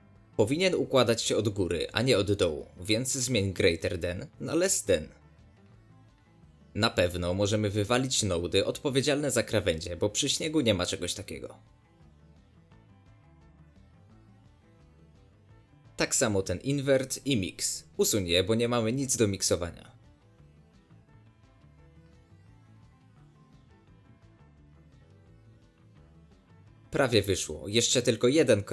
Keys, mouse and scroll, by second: 0.6 scroll down 10, 0.8-5.6 middle drag, 5.6 click, 6.5 scroll up 1, 6.6-8.1 middle drag, 8.1-9.2 shift+drag, 9.5 scroll down 1, 9.5 middle drag, 9.7 scroll up 2, 9.8-12.7 middle drag, 12.7 x, 13.3 middle click, 13.4 Left, 14.6 ctrl+shift+click, 15.0-16.0 middle drag, 16.0 ctrl+shift+click, 16.5 middle click, 16.9-18.7 scroll up 1, 18.7 click, 21.4 Delete, 21.9 click, 22.3 Delete, 23.1-24.7 middle drag, 24.7 click, 25.6-28.7 middle drag.